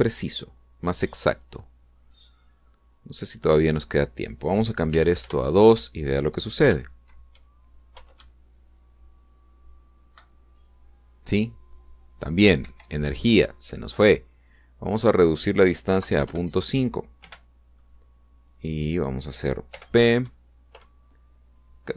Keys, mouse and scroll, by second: 2.3 click, 3.1 click, 4.5 click, 5.9 2, 6.2 Return, 7.6 p, 8.3 Left, 9.2 Right, 13.6 Escape, 15.5 click, 16.9 ., 17.1 5, 17.3 Return, 18.2 p, 20.7 p, 21.2 Left, 21.8 Right.